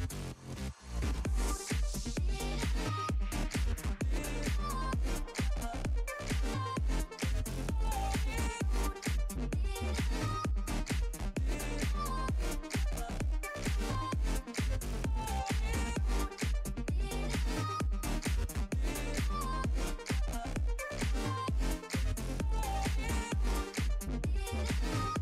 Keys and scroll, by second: 15.5 z.